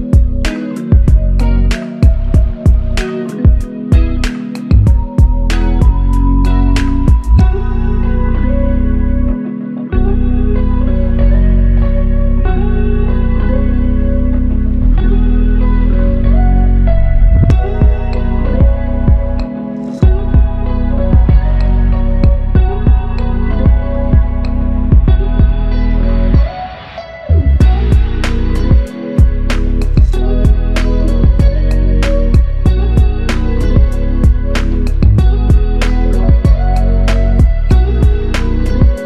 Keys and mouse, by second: 0.7 double click, 4.5 alt+click, 6.8 alt+click, 8.9 double click, 11.9 double click, 14.4 alt+click, 19.8 double click, 25.3 double click, 33.4 double click, 38.8 double click.